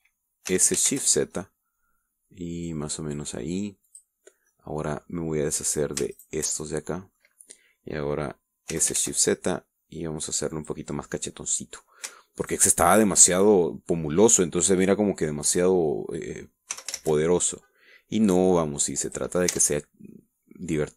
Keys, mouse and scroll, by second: 1.6 s, 2.1 shift+z, 5.7 middle click, 7.3 alt+shift+middle click, 7.7 alt+shift+middle click, 9.9 s, 10.1 shift+z, 11.7 click, 12.3 middle click, 13.6 alt+shift+right click, 13.9-15.8 alt+shift+middle drag, 17.9 s, 18.2 shift+z, 20.2 click, 20.7 Tab.